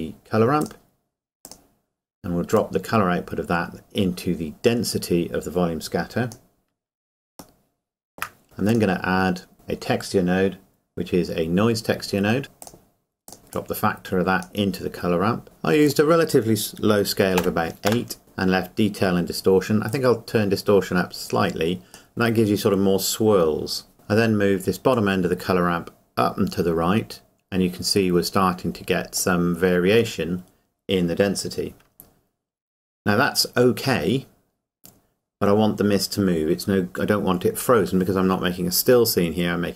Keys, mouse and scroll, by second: 2.8 click, 7.6 shift+middle click, 8.7 click, 12.6 click, 15.9 click, 17.4 KP_8, 19.9 click, 24.9 click.